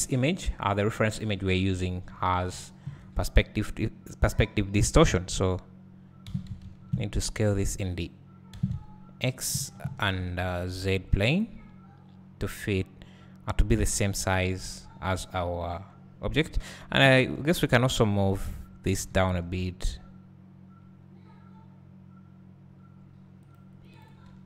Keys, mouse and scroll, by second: 0.7 click, 2.1 3, 2.7 alt+click, 6.3 s, 8.0 right click, 8.6 s, 10.4-12.6 right drag, 17.0-23.4 right drag, 17.0 1, 17.9 shift+click, 19.0 g, 24.0 right click, 24.0 click, 24.3 `.